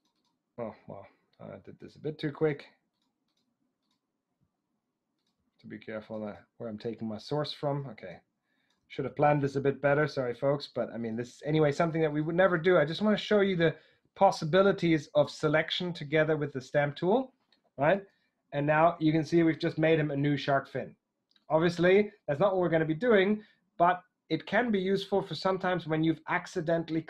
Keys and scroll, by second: 18.1 super+d.